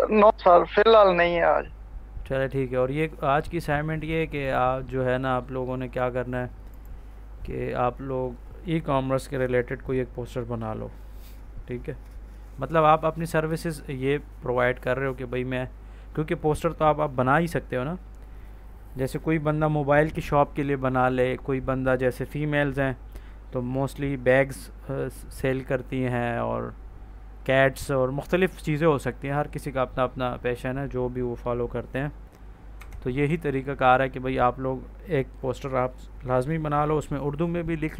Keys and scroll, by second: 32.6 Escape.